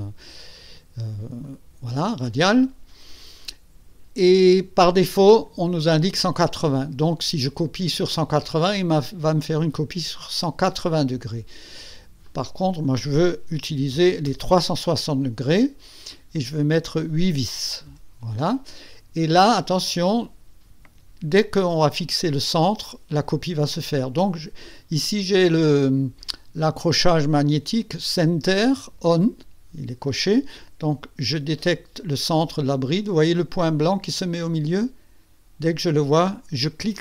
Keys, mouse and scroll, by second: 1.4 click, 5.2 click, 12.2 click, 13.7 KP_3, 13.9 KP_6, 14.2 KP_0, 16.1 click, 17.9 KP_8.